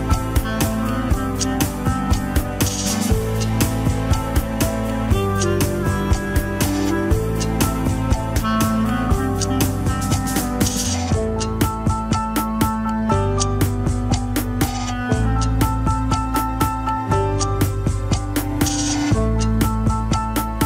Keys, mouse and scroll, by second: 0.9 click, 1.4 shift+click, 2.1 ctrl+p, 2.7 Up, 4.4 drag, 4.9 shift+drag, 5.3 ctrl+Tab, 6.0 alt+z, 6.9 ctrl+click, 7.0 alt+z, 7.4 click, 7.7 Tab, 7.7 a, 8.7 click, 9.3 Tab, 10.2 click, 11.0 shift+middle drag, 11.2 scroll up 1, 11.5 h, 11.8 click, 12.3-12.7 middle drag, 12.7 shift+drag, 13.2 ctrl+Tab, 14.7 ctrl+Tab, 15.1 click, 16.0 shift+click, 16.9 ctrl+p, 18.3 drag, 18.7 shift+drag, 19.2 ctrl+Tab, 20.4 click.